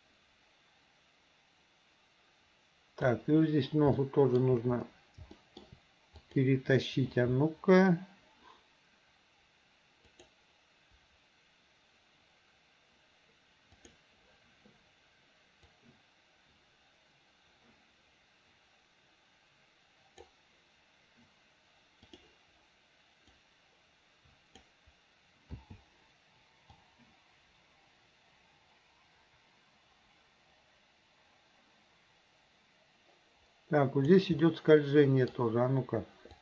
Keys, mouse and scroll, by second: 4.0-4.5 shift+middle drag, 5.4 shift+middle click, 6.2 click, 10.2 click, 13.8 click, 15.8-20.4 drag, 22.1 click, 23.4-24.7 drag, 25.6 i, 26.8-34.2 drag, 34.5-35.4 middle drag.